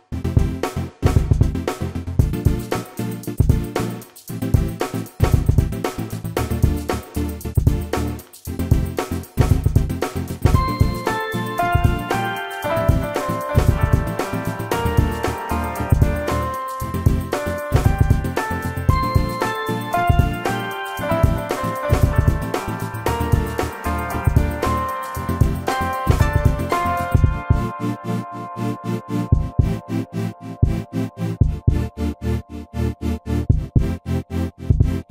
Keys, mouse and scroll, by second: 4.7 Delete, 13.1 shift+middle click, 14.5 shift+middle click, 14.7 shift+middle click, 16.8 space, 17.3 shift+click, 17.4 shift+double click, 25.5 shift+middle click.